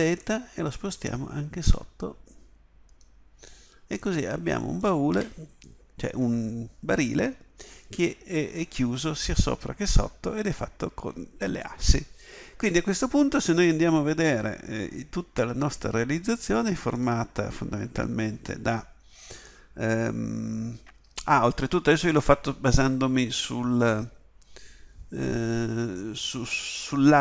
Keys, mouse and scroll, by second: 5.1 z.